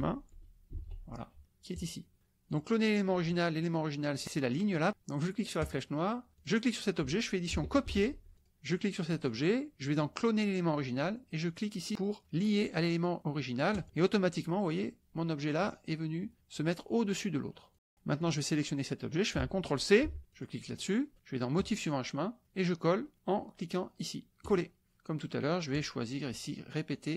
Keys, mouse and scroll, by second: 0.7 t, 0.8 i, 1.8 click, 2.6 drag, 5.6 click, 6.3 click, 7.8 ctrl+c, 8.4 drag, 13.7 click, 17.7 click, 18.3 click, 20.0 ctrl+c, 20.3 click, 21.6-22.0 drag, 24.4 click, 25.7-27.1 drag.